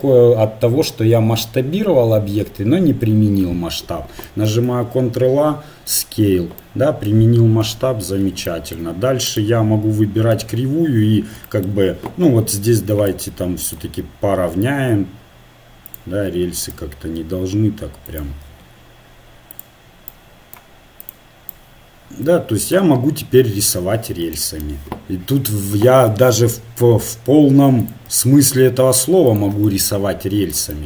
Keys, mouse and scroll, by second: 4.5 ctrl+a, 7.6 KP_7, 9.3-11.2 right drag, 10.4 Tab, 13.1 right click, 13.5 click, 13.7 right click, 14.6-15.7 drag, 14.6 r, 16.7-18.4 drag, 17.2 s, 18.5 r, 20.1 right click, 21.5 right click, 26.8 r, 28.1 s.